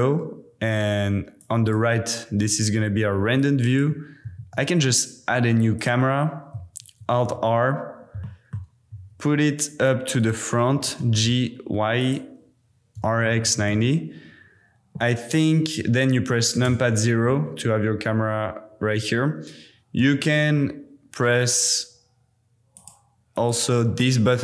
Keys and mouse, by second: 1.3 click, 3.4 click, 4.4 shift+a, 7.0 alt+r, 8.2-8.6 drag, 8.9 r, 10.2 click, 10.7 g, 11.0 y, 12.0 click, 12.9 r, 13.2 x, 13.4 KP_9, 13.5 KP_0, 13.7 KP_Enter, 16.7 KP_0, 20.0 t, 20.3 t, 22.7 middle click, 23.3 middle click.